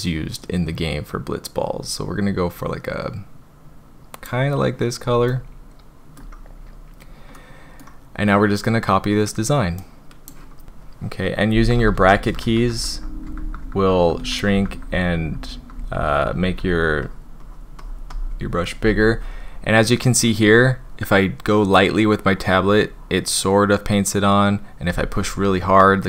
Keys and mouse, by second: 5.3-6.2 shift+drag, 7.3 click, 9.8 click, 11.6-16.5 typing, 17.0 drag, 17.4 drag, 17.8 click, 18.1 drag, 20.7-21.0 drag, 21.4-21.8 drag, 22.1-22.5 drag, 22.9-23.2 drag, 23.6-23.9 drag, 24.3 drag, 24.9-26.0 drag.